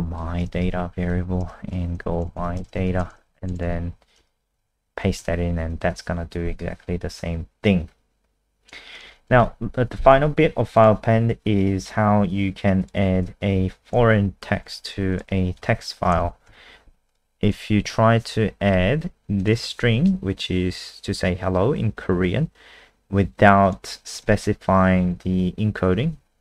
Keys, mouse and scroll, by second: 0.0-2.2 typing, 1.4 Return, 5.2 ctrl+s, 7.0-7.9 scroll down 1, 7.9-8.9 scroll down 2, 8.9 click, 9.4 ctrl+a, 9.5 Delete, 10.8 click, 11.4-11.8 scroll down 1, 12.8 click, 13.6 Left, 13.8 Right, 14.1 shift+Home, 14.6 ctrl+c, 15.1 click, 15.7 Home, 15.9 Down, 16.2 shift+Up, 16.5 Delete, 17.1 click, 17.5 ctrl+v, 17.8 ctrl+s, 19.4 click, 19.5 click, 23.6 click, 24.2 ctrl+s, 26.2 F5.